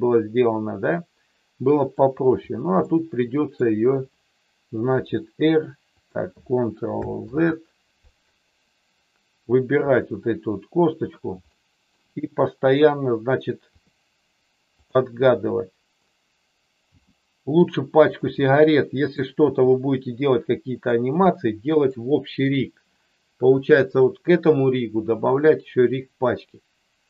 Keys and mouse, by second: 2.8 middle click, 4.9 r, 5.9 click, 7.5 ctrl+z, 9.8 click, 11.6 middle click, 13.7 r, 14.7 click, 15.2 middle click, 16.8 g, 18.0 click, 18.3 middle click, 21.2 middle click.